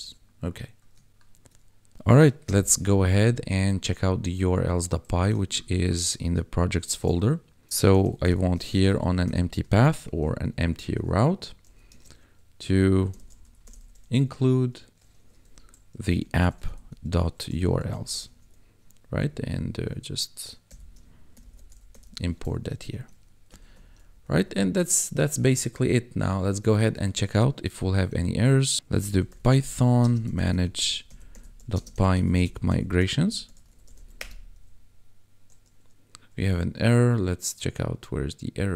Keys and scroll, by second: 2.5 ctrl+b, 6.9 ctrl+b, 7.6 Return, 7.9-10.2 typing, 11.3 Right, 11.6 ,, 11.9 space, 13.2 n, 13.4 l, 13.6 u, 13.8 e, 15.2-17.9 typing, 19.1 Up, 20.7-22.1 typing, 22.6 ctrl+s, 23.0 Escape, 23.9 Down, 25.7 Down, 26.6 ,, 26.9 ctrl+s, 27.7 ctrl+`, 29.0-33.8 typing, 34.2 Return.